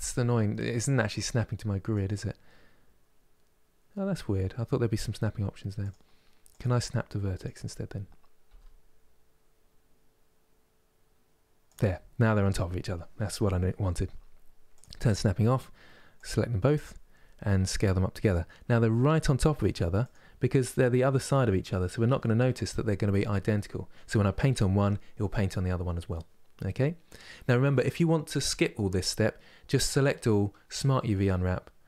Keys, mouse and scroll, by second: 14.4 click, 16.3 click, 17.2 s, 18.5 g, 20.5-31.8 middle drag.